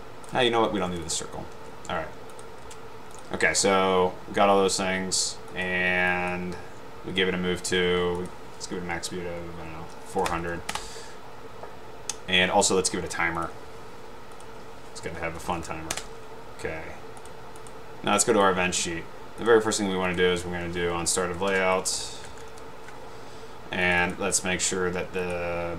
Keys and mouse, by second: 1.1 click, 5.6 click, 10.4 0, 10.8 Return, 14.5 click, 15.2-16.0 typing, 16.1 Return, 17.7 click, 18.4 click, 19.6 click, 20.2 click, 21.9-23.1 typing, 24.1 click.